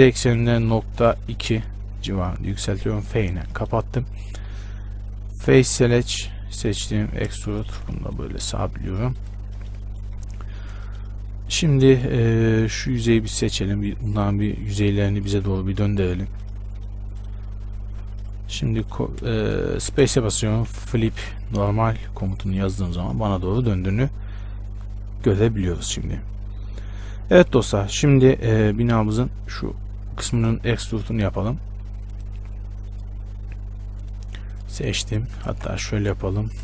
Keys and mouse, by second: 3.2 f, 5.8-8.4 drag, 6.8 right click, 7.2 e, 8.4 Tab, 10.6 Tab, 13.2 b, 14.2 b, 16.3 ctrl+m, 20.2 space, 22.9 Tab, 30.7 Tab, 32.3 click, 34.2-35.8 middle drag, 35.4 a.